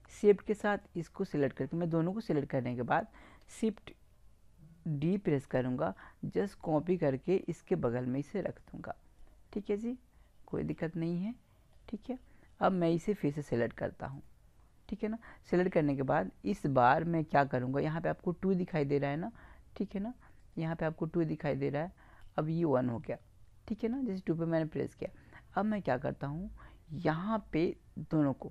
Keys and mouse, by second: 0.8-2.5 right drag, 2.5-5.3 middle drag, 5.3 shift+d, 8.5-10.5 drag, 10.5 middle click, 20.4-22.2 drag, 28.3-28.5 drag.